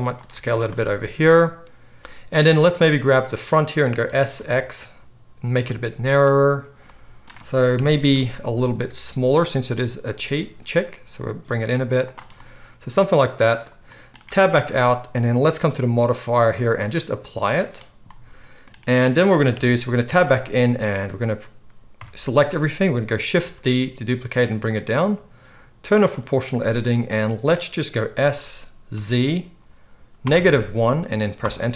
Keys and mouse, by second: 0.2 right click, 0.3 click, 0.3 z, 0.9-2.9 right drag, 2.0 Tab, 2.9-24.6 middle drag, 4.0 s, 7.7 KP_3, 9.3 g, 14.2 Tab, 18.4 click, 18.4 right click, 19.5 KP_3, 20.0 Tab, 22.0 a, 23.2-24.8 shift+drag, 23.2-24.6 shift+right drag, 23.3 shift+d, 26.0 click, 26.7 z, 28.2 s.